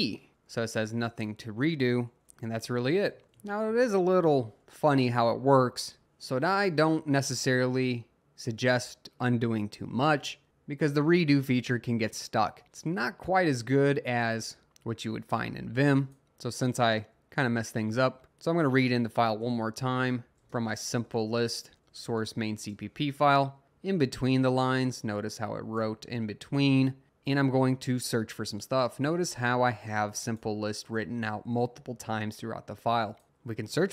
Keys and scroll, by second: 0.0-0.5 typing, 3.7 Escape, 4.1-5.1 typing, 16.2 Up, 16.6 Up, 17.1 Up, 19.6-22.1 typing, 22.2 Tab, 22.7 Return, 23.6 Up, 23.9 Up, 25.1 Down, 25.6 Down, 26.6-27.0 Up, 27.2 Up, 27.6 Up, 27.7 Up, 27.9 Up, 28.0 Up.